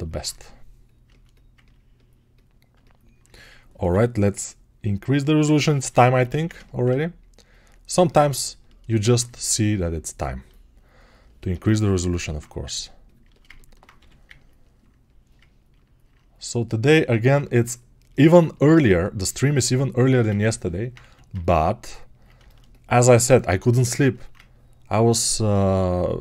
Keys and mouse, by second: 5.7 ctrl+r, 9.0-14.1 shift+right drag, 14.1-17.2 ctrl+alt+drag, 21.2 ctrl+1, 22.1-26.2 alt+shift+drag.